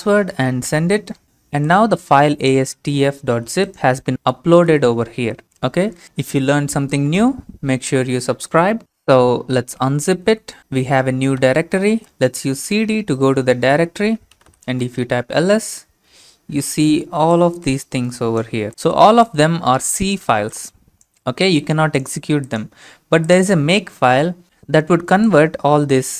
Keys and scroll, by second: 0.7 Return, 4.6-5.1 typing, 5.1 Return, 9.5-11.9 typing, 14.1-14.9 typing.